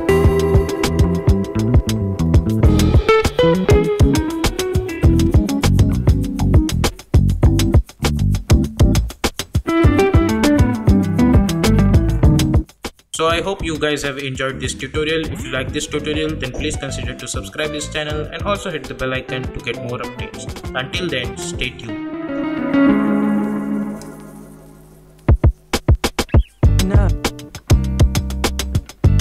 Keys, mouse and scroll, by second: 3.4 space, 3.7 click, 4.5 v, 4.9 click, 5.8-6.7 typing.